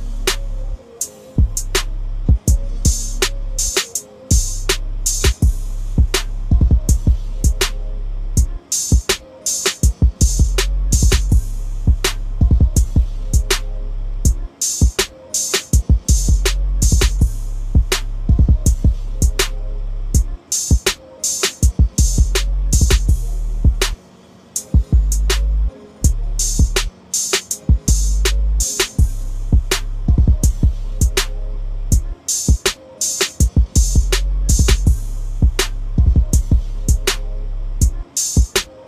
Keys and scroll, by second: 2.3 ctrl+v, 36.5-36.9 typing.